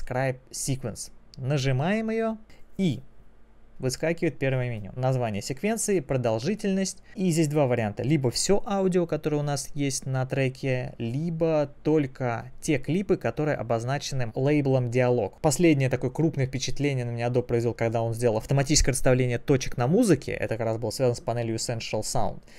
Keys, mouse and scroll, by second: 1.6 click.